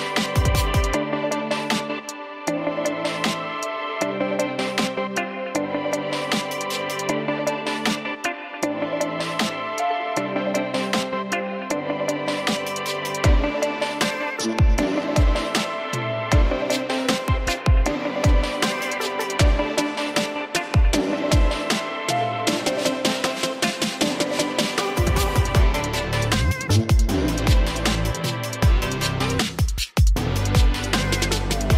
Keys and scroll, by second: 2.1 Down, 20.9 ctrl+alt+shift+e, 29.3 ctrl+i.